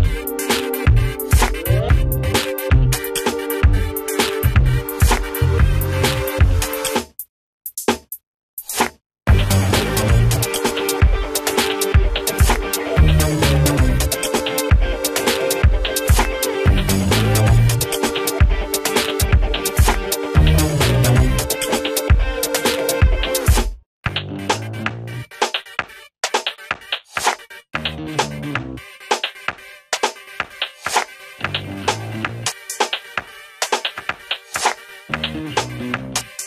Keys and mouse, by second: 3.6 F2, 4.0 click, 5.3 right click, 6.8 click, 9.6 click, 10.4 right click, 11.0 click, 13.0 ctrl+z, 13.1 ctrl+click, 14.7 right click, 15.2-19.9 drag, 19.9 right click, 20.4 click, 20.6 right click, 22.3 click, 27.3 click, 29.0 ctrl+space, 29.6 shift+click, 32.0 Delete, 32.4 click, 32.8 F3, 33.4 shift+click, 33.8 s, 34.3 click, 35.0 ctrl+z, 35.3-36.4 drag.